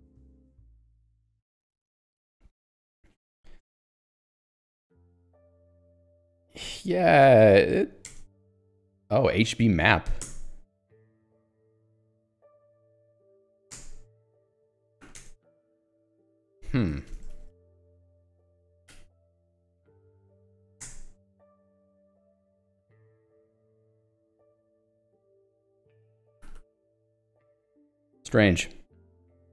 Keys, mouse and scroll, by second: 0.0-1.4 typing, 1.7 Escape, 5.8 ctrl+f, 7.0 ctrl+g, 7.3 ctrl+alt+j, 8.1 Return, 8.4 super+e, 9.0 k, 10.2 Return, 11.0 k, 13.1 super+e, 13.5 j, 13.7 Return, 14.4 super+e, 15.0 k, 15.2 Return, 15.9 super+e, 17.1-21.0 typing, 18.9 alt+h, 22.6 j, 24.5 l, 25.7-28.2 typing, 28.3 Escape.